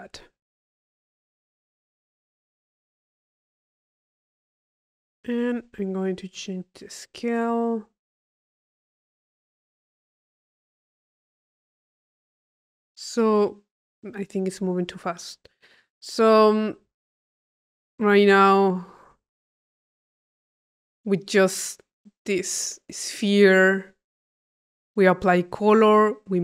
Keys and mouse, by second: 0.9-4.2 drag, 4.4 click, 5.3 click, 5.9 click, 6.4-9.9 middle drag, 14.0 click, 15.3 click, 16.4 click, 17.7 click, 18.6 click, 21.1 click, 21.8-22.9 middle drag, 22.9 right click, 23.9-25.2 drag, 25.3 click.